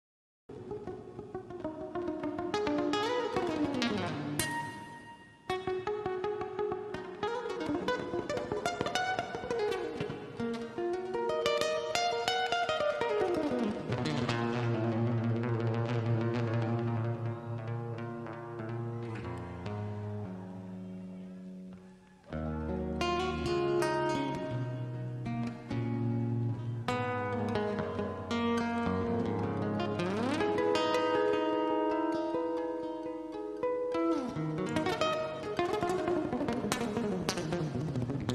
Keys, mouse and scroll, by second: 1.1 c, 2.1 c, 2.9 KP_0, 4.8 d, 6.2 KP_1, 8.1 scroll down 1, 8.6 scroll up 1, 9.1 middle click, 10.0 click, 11.8-12.3 scroll down 1, 12.3 middle click, 12.7 scroll up 1, 13.3 scroll up 1, 14.9 click, 16.0 click, 16.7 KP_1, 18.5 scroll up 1, 18.7-19.2 scroll down 1, 19.2 middle click, 19.8-20.4 scroll up 1, 21.5-22.2 typing, 23.4 Return, 26.5 click, 32.8 KP_5, 36.1 click, 37.0-37.5 scroll down 1, 37.6 middle click, 38.2-38.3 scroll down 1.